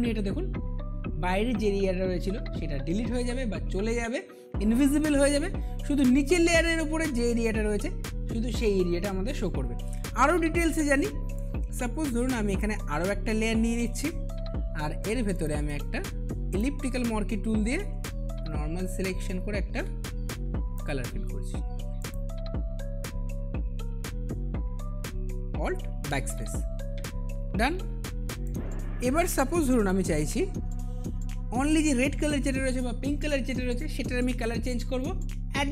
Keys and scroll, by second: 26.0 alt+BackSpace, 27.6 ctrl+d.